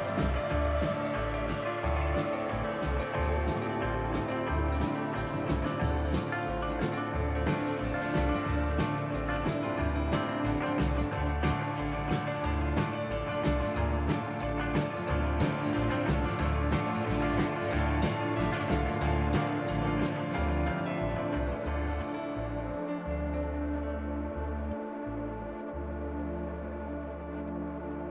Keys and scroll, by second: 1.5 ctrl+z, 8.7 ctrl+z, 27.5 ctrl+z.